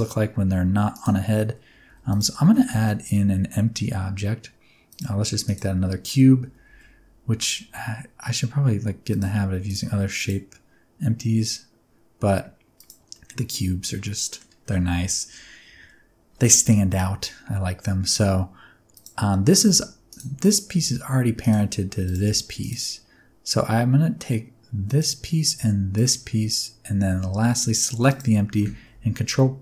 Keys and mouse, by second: 0.9 right click, 1.8 alt+a, 2.5 shift+a, 5.5 right click, 6.4 g, 6.6 x, 9.0 click, 9.6 click, 12.7 click, 13.1-14.3 middle drag, 15.6 KP_1, 18.9 click, 19.6 g, 20.1 click, 20.7 g, 21.4 click, 22.0 click, 22.2 g, 22.6 click, 24.9 click, 25.9 shift+click, 28.0 shift+click.